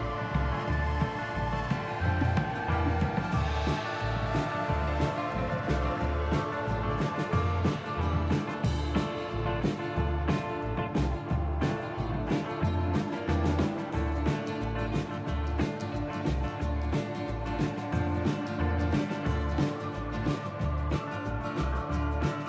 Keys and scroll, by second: 19.7 ctrl+z.